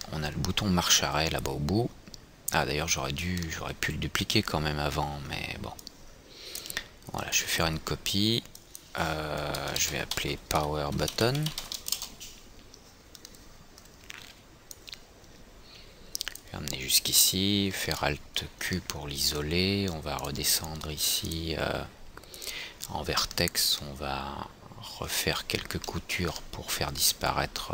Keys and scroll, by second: 12.4 Return, 18.2 alt+q.